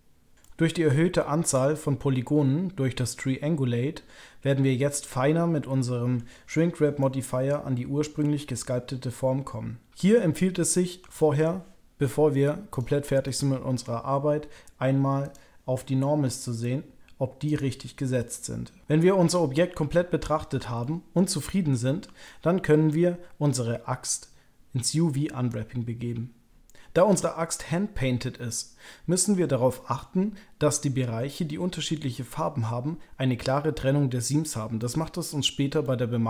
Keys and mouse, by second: 0.4-6.1 middle drag, 6.9-10.1 middle drag, 11.1 shift+middle click, 16.7-18.2 drag, 18.2-18.8 middle drag, 19.0-20.5 middle drag, 20.8 shift+middle click, 21.4 middle click, 22.2 shift+middle click, 22.9-29.3 middle drag, 29.7 shift+middle click, 34.8 shift+click, 34.9 shift+middle click, 35.8-36.2 middle drag.